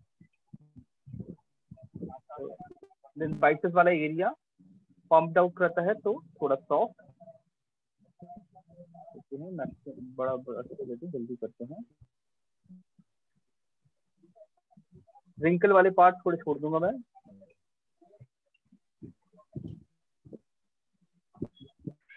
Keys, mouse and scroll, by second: 0.5 click, 1.4 click, 2.5 alt+click, 3.4 click, 4.5 click, 8.4-10.4 ], 10.4 click, 12.4 click, 13.5 click, 14.7 click, 15.4 click, 18.5 click, 19.4 alt+click, 20.4 click, 21.4 click.